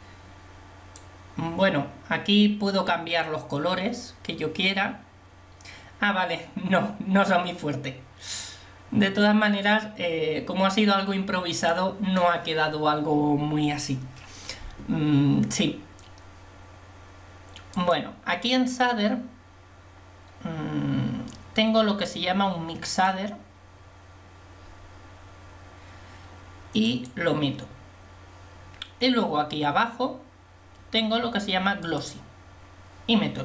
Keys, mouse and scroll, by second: 9.0 click, 17.8-24.9 drag, 32.6-33.4 drag.